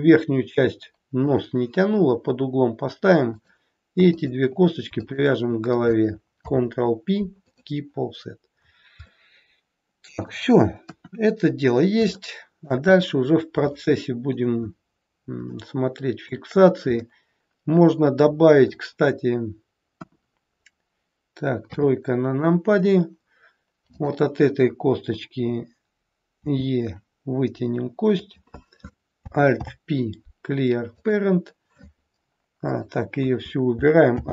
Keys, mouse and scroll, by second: 4.0 shift+click, 5.3 click, 6.4 ctrl+p, 8.0-9.2 scroll down 7, 9.2 middle click, 10.8 KP_1, 11.4-11.9 scroll up 4, 12.0 shift+middle click, 12.9-13.5 scroll down 1, 13.8 shift+middle click, 17.0 middle click, 19.9 KP_1, 20.5-20.9 scroll up 2, 21.7 KP_3, 23.9 click, 26.4 e, 29.5 alt+p, 32.5 click, 34.2 alt+p.